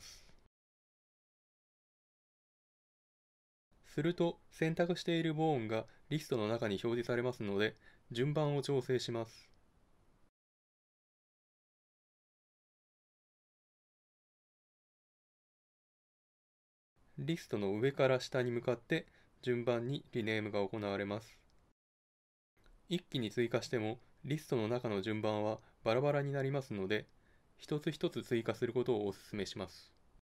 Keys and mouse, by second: 0.7 click, 11.1-17.1 drag.